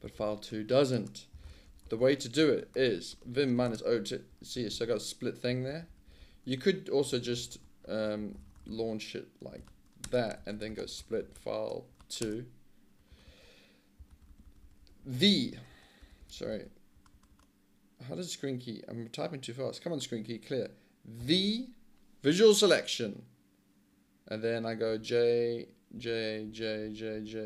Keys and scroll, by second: 0.0-17.5 typing, 21.2 v, 24.9 j, 26.0 j, 26.5 j, 26.9 j, 27.2 j.